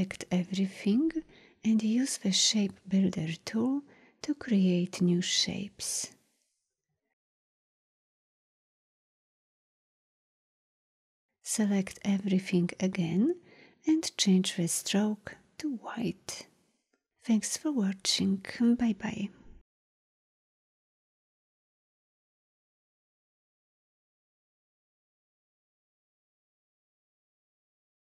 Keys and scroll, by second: 2.1 shift+m.